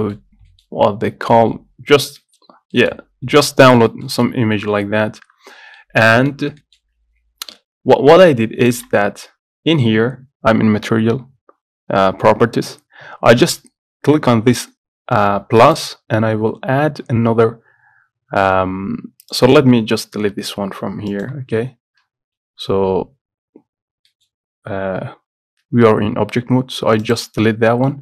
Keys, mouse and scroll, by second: 0.9-1.2 scroll up 1, 2.0-2.3 scroll down 2, 2.7 scroll down 1, 3.2-4.0 scroll up 3, 4.0-5.1 shift+middle drag, 5.1-5.9 scroll down 2, 5.9 middle click, 6.4-6.7 scroll up 2, 6.7 shift+middle click, 7.0-7.6 scroll up 1, 7.6 Tab, 8.2 middle click, 8.9 click, 24.5-27.3 scroll up 1, 27.3 click.